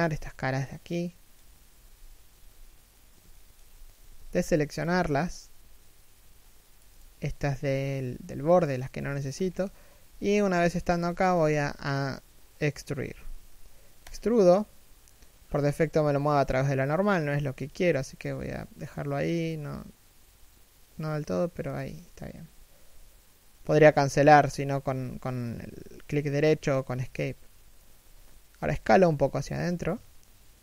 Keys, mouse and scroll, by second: 0.5 middle click, 1.4 3, 2.0 1, 3.0 alt+shift+middle click, 3.6 b, 8.7 alt+shift+middle click, 9.0 alt+shift+scroll down 1, 9.1-9.8 scroll up 1, 9.8 KP_3, 10.2 KP_1, 10.8 alt+shift+middle click, 12.8 e, 28.2 s.